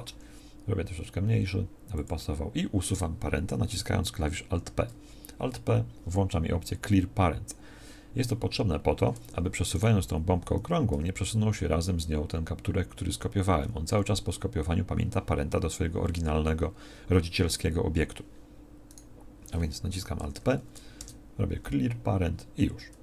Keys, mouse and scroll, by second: 0.1 s, 4.4 alt+p, 10.9 g, 20.2 alt+p.